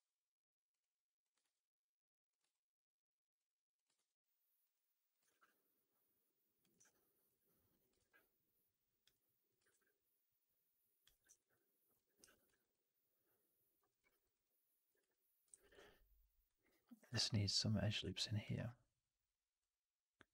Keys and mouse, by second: 1.1 click, 2.4 click, 5.0 click, 5.2 shift+s, 6.7 alt+click, 7.6 click, 9.4 click, 11.2 right click, 11.4 click, 12.1 4, 12.4 alt+right click, 12.6-13.6 drag, 13.8 middle click, 13.9 right click, 14.1 right click, 14.3 click, 14.9 3, 15.4 shift+x, 15.7 alt+click, 16.3 alt+right click, 16.7 alt+click, 17.0 shift+f, 17.9 alt+click, 20.1-20.3 drag.